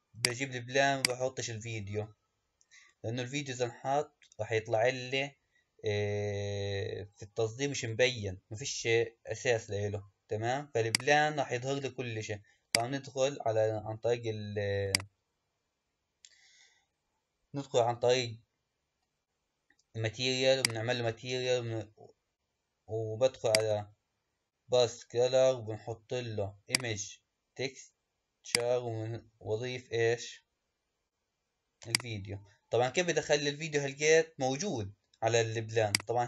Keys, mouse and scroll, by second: 0.0 click, 0.9 click, 10.8 click, 12.6 click, 14.9 click, 20.5-21.6 drag, 21.6-23.4 scroll down 2, 23.4-26.5 drag, 28.4-31.5 drag, 32.9-34.9 scroll down 1, 34.9-35.8 scroll down 1, 35.8 click.